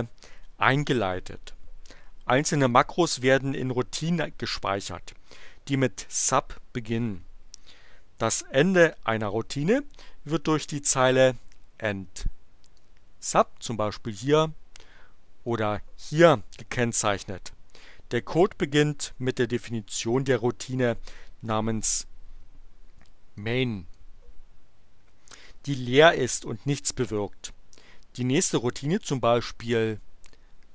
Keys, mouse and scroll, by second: 12.7 click, 14.7 click, 23.4 click, 30.2 click.